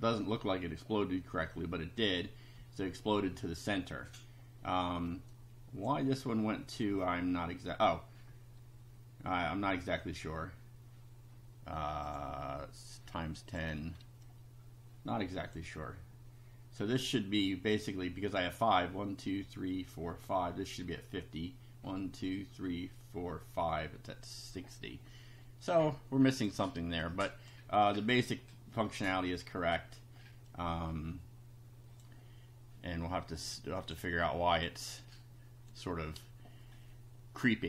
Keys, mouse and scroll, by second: 4.6 middle click, 5.3 click, 12.1 click, 13.5 click, 14.2-15.7 drag, 26.4 click, 27.0 click, 27.8 click, 29.0 scroll down 1, 29.5 scroll up 1, 29.6-30.1 scroll down 1, 30.5-32.1 drag, 33.8 click.